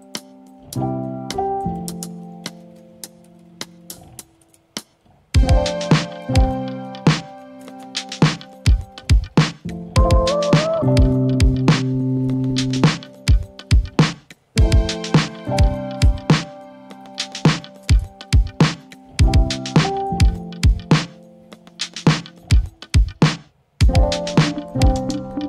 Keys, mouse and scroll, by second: 0.0 click, 1.7 click, 1.8-21.8 typing.